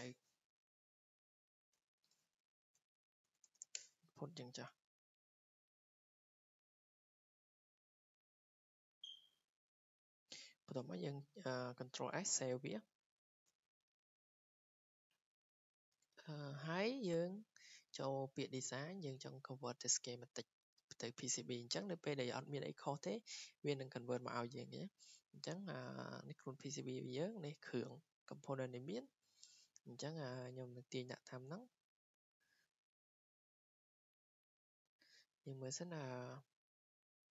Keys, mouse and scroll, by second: 0.0-0.2 typing, 0.4 Escape, 1.4 click, 1.6 click, 1.8-4.2 typing, 4.2 Escape, 5.7 click, 7.3 click, 8.1 w, 8.8 click, 9.7 click, 10.0 Escape, 10.3 Escape, 10.5 Escape, 12.0 ctrl+s, 14.4-14.7 scroll down 4, 15.3 scroll, 19.5 click, 19.8 scroll up 1, 22.7-28.3 drag, 28.3-29.3 scroll up 2, 29.3 scroll down 2, 31.9 scroll, 33.0 click, 33.6 click, 34.7 click, 35.6 click.